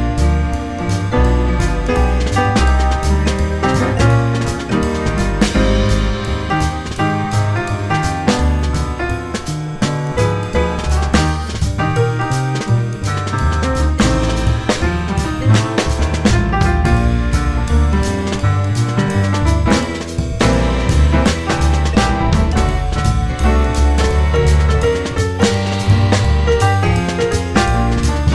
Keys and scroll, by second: 0.5 2, 0.5 F4, 1.2 ctrl+r, 1.5 ctrl+r, 1.9 ctrl+r, 2.8 ctrl+r, 3.7 ctrl+r, 4.0 ctrl+z, 4.7 ctrl+z, 5.1 ctrl+z, 5.4 ctrl+r, 6.9 ctrl+c, 9.1 2, 10.2 F4, 11.6 F4, 13.1 F4, 13.2 1, 14.6 2, 16.4 ctrl+z, 17.5 1, 17.9 2, 18.2 ctrl+r, 19.0 ctrl+c, 19.7 1, 20.5 alt+c, 23.9 ctrl+z, 27.2 F3.